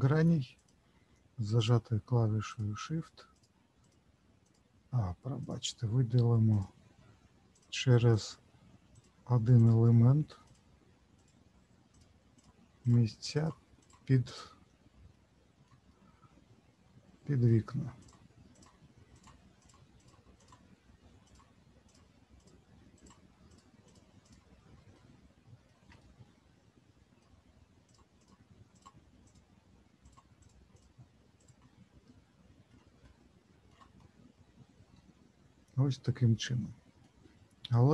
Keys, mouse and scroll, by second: 0.5 click, 1.6 shift+click, 2.5 shift+click, 3.8 shift+click, 4.4 shift+click, 6.5 shift+click, 7.5 shift+click, 8.1 shift+click, 8.9 shift+click, 9.5 shift+click, 10.5 shift+click, 11.9 shift+click, 12.3 shift+click, 13.3 shift+click, 13.8 shift+click, 15.1 shift+middle click, 18.0 shift+click, 18.5 shift+click, 19.6 shift+click, 19.9 shift+click, 21.2 shift+click, 21.9 shift+click, 22.9 shift+click, 23.5 shift+click, 23.8 shift+click, 24.9 shift+middle click, 27.9 shift+click, 28.2 shift+click, 29.2 shift+click, 30.0 shift+click, 30.7 shift+click, 31.3 shift+click, 32.0 shift+middle click, 32.9 shift+scroll down 1, 33.0 shift+middle click, 33.9 middle click, 37.5-37.9 scroll up 2.